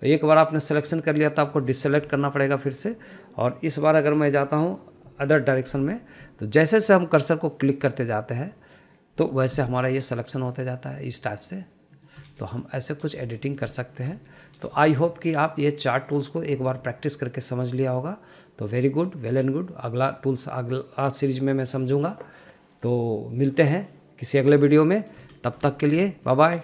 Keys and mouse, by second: 0.3 middle click, 2.0 click, 2.8 middle click, 3.6 shift+middle click, 3.9 shift+middle click, 6.5 KP_3, 8.4 click, 8.9 drag, 9.4 drag, 9.8 click, 11.0 s, 13.4 click, 13.9 middle click, 14.9 shift+middle click, 15.2 middle click, 15.6 shift+middle click, 16.2 shift+middle click, 16.9-21.3 drag, 26.3 middle click.